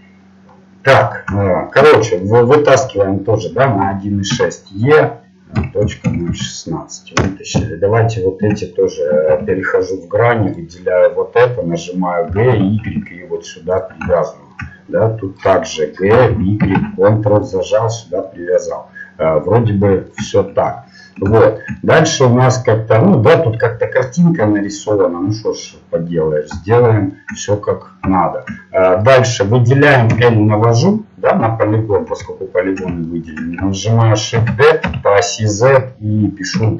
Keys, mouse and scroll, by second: 0.6-2.8 middle drag, 4.3 e, 7.8-9.4 middle drag, 9.9 ctrl+Tab, 10.5-12.3 right drag, 12.3 g, 14.2 middle click, 16.1-17.4 right drag, 16.1 g, 17.8-20.2 middle drag, 29.0 right click, 30.1 l, 32.1 l, 34.3 shift+d.